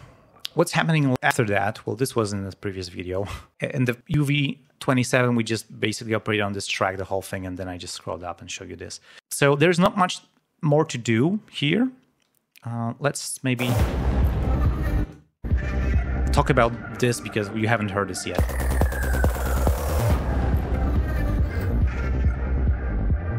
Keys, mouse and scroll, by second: 0.3 ctrl+scroll down 3, 2.0 click, 6.8-7.2 scroll up 2, 8.9 ctrl+scroll up 2, 13.2 click, 13.5 space, 13.7 ctrl+scroll up 2, 14.9 click, 15.3 click, 15.8 ctrl+scroll down 2, 16.6 ctrl+space, 16.8 click, 17.5 click, 18.3 space, 19.0 ctrl+scroll down 2, 19.4 ctrl+scroll up 2.